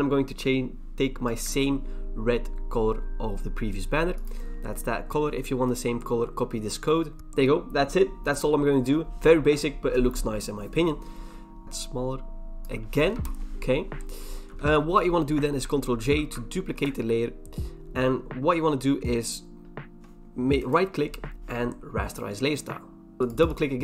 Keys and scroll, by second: 11.6 ctrl+t, 13.1 Return, 14.5 v, 16.1 ctrl+j.